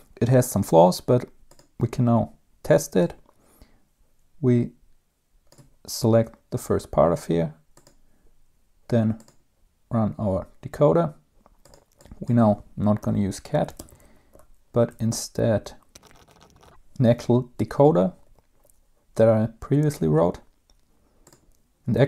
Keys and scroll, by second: 13.5-17.4 typing.